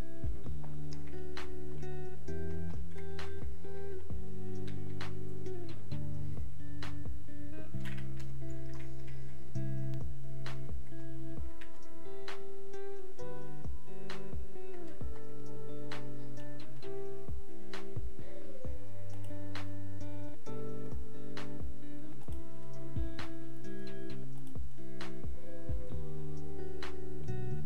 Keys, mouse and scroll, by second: 1.7 click, 14.7 click.